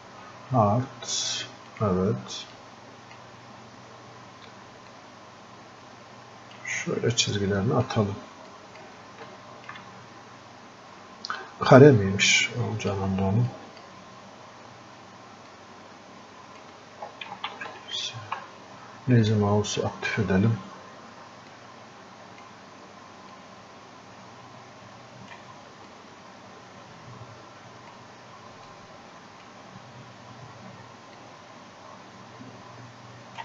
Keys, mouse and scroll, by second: 13.9-33.4 drag.